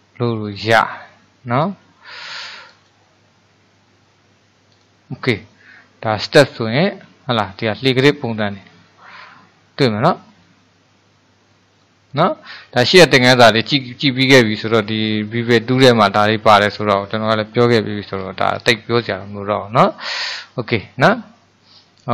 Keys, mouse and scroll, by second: 2.7-5.8 drag, 7.1-13.8 middle drag, 19.8-22.1 middle drag.